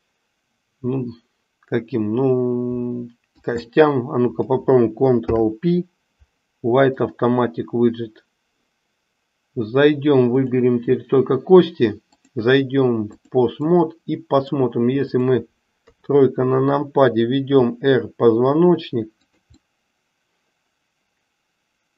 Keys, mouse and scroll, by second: 3.4 shift+click, 5.1 ctrl+p, 12.1-13.4 drag, 13.7-14.7 middle drag, 15.0 click, 17.5 r, 19.6-21.9 middle drag.